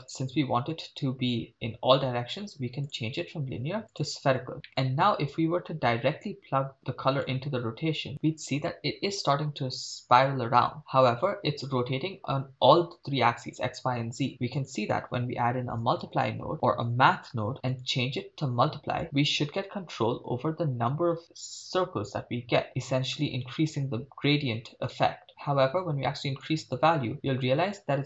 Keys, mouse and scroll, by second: 2.8-4.1 drag, 4.7 middle click, 6.3-7.4 drag, 14.3 shift+a, 17.1 BackSpace, 17.7-19.0 drag, 26.4-28.0 drag.